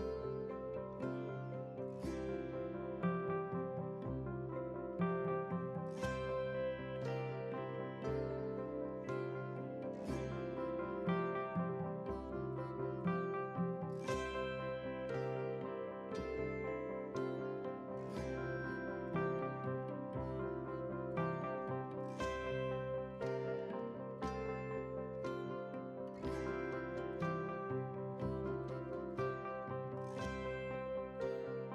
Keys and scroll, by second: 2.8 ctrl+c, 4.4 F8, 5.4 ctrl+v, 5.9 ctrl+space, 15.6 ctrl+c, 16.6 ctrl+v, 22.0 ctrl+c, 23.6 ctrl+a, 24.4 ctrl+v, 25.2 ctrl+space.